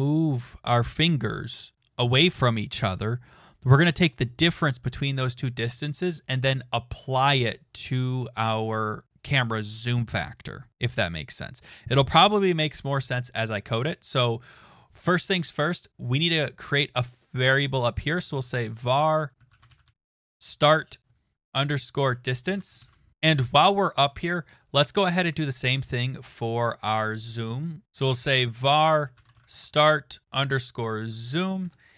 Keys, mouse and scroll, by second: 16.4-17.5 scroll down 6, 17.5 click, 17.9-23.3 typing, 21.1 Down, 23.1 click, 23.4 Return, 23.6 Return, 27.7-31.7 typing.